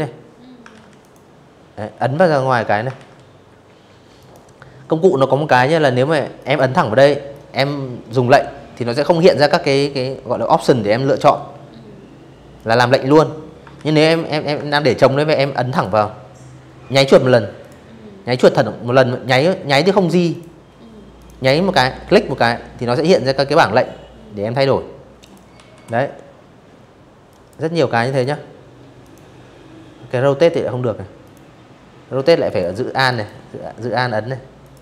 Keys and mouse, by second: 0.6 ctrl+z, 1.8 click, 4.0 click, 5.0 click, 10.2 click, 11.4 ctrl+z, 12.3 ctrl+z, 13.4 click, 15.2 click, 16.1 click, 16.9 click, 17.6 ctrl+z, 18.0 click, 18.8 click, 22.9 click, 23.2 v, 25.0 click, 25.7 click, 26.7 click, 28.9 click, 30.2 alt+click, 30.8 alt+click, 32.3 click, 34.7 click.